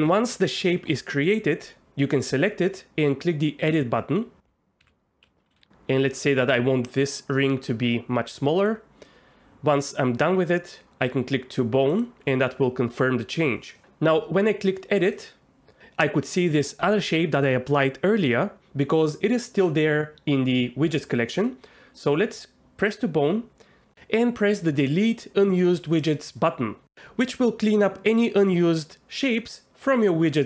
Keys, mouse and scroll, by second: 3.8 click, 4.9 alt+a, 5.3 l, 5.5 s, 8.6-15.2 drag, 22.8 click, 28.4 ctrl+z, 29.9 click, 30.2 Tab.